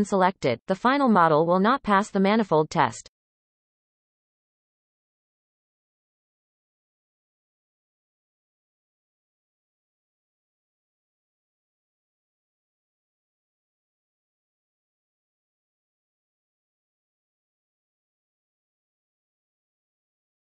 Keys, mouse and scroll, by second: 8.1-9.4 scroll up 12, 8.5 shift+middle click, 9.7 c, 10.3 scroll down 1, 10.5 shift+middle click, 11.2 c, 11.8 scroll down 1, 12.0 shift+middle click, 12.1-12.5 scroll up 2, 12.5 c, 13.6 scroll down 2, 13.8 shift+middle click, 14.0-14.8 scroll up 4, 14.1 shift+middle click, 14.8 scroll down 2, 15.0 shift+middle click, 15.2-15.5 scroll up 4, 15.6 scroll down 2, 15.7 shift+middle click, 15.9-16.4 scroll up 4, 16.6 shift+middle click, 16.8 scroll up 1, 17.0 shift+middle click, 17.3 scroll down 3, 17.5 shift+middle click, 18.1-19.0 scroll down 7, 19.0-20.5 middle drag.